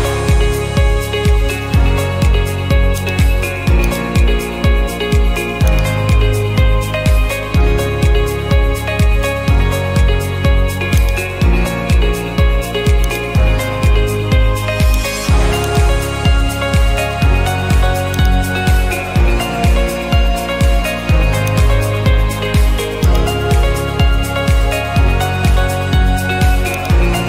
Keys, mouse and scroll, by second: 3.1 click, 4.0 click, 5.8 click, 6.9-8.1 typing, 9.8 Escape, 11.1 click, 13.2 ctrl+click, 15.1 click, 15.8 click, 18.2-19.4 drag, 21.6 click, 23.2 click, 24.0-25.2 typing, 26.9 click.